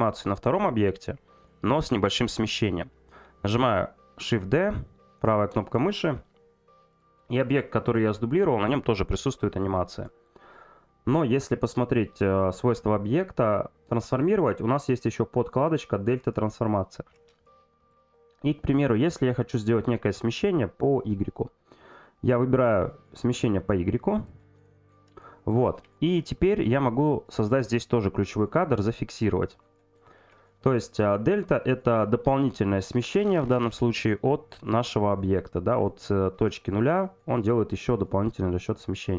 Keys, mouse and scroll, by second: 0.0 middle click, 5.2 right click, 6.9 click, 7.4 click, 22.0-24.4 drag.